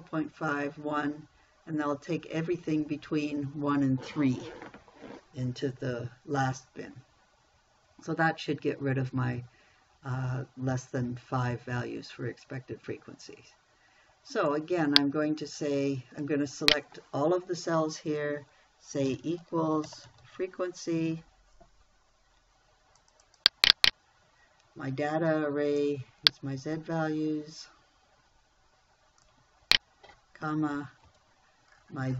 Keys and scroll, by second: 19.5 =, 20.3 f, 20.5 r, 20.7 e, 31.5 ,.